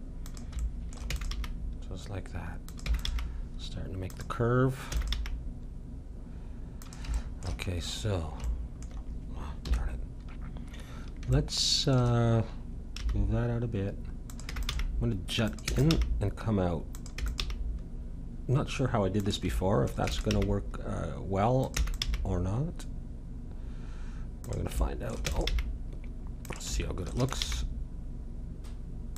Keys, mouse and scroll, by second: 0.6 middle click, 1.1 e, 1.3 g, 2.8 e, 3.1 g, 4.9 e, 5.2 g, 7.1-8.2 middle drag, 9.6 KP_1, 13.0 g, 14.5 e, 14.7 g, 15.6 e, 15.9 g, 17.1 e, 17.4 g, 19.6 middle click, 20.0 e, 20.3 g, 21.8 e, 22.0 g, 24.8-28.8 middle drag, 25.3 e, 25.5 g, 27.2 e, 27.5 g.